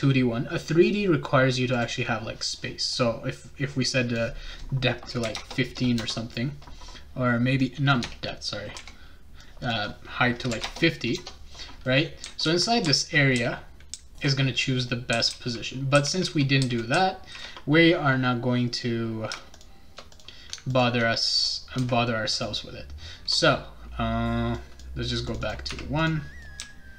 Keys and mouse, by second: 0.1 right click, 1.7 click, 3.8 click, 7.6 click, 8.0 BackSpace, 9.4 click, 11.8-14.2 right drag, 12.2-17.4 typing, 14.8-17.4 shift+right drag, 19.5 shift+click, 20.1 click, 20.7 ctrl+click, 22.3 click, 24.5 click, 25.2 click, 25.4 click, 25.7-26.9 typing, 26.0 click, 26.4-26.9 right drag.